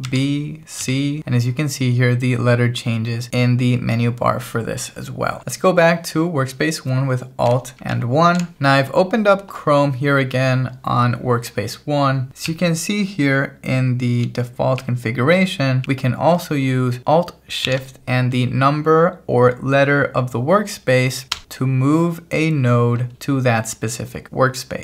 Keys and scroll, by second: 8.0 alt+1, 12.5 j, 14.8 k, 17.7 shift+v, 21.3 Escape, 21.4 l, 23.2 l.